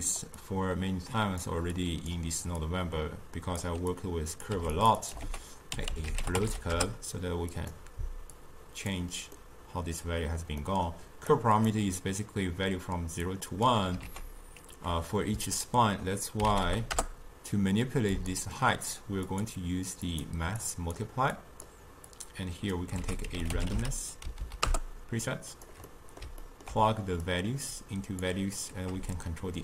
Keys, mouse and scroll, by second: 0.0 click, 0.4-1.9 drag, 2.7-4.5 drag, 4.5 g, 5.1 click, 5.3 ctrl+a, 8.4-9.4 drag, 9.4-11.3 middle drag, 11.3 click, 13.3 click, 14.1 ctrl+a, 19.3-21.4 drag, 22.2 click, 23.0 ctrl+a, 24.5 Down, 25.9-27.3 middle drag, 27.3-29.6 drag.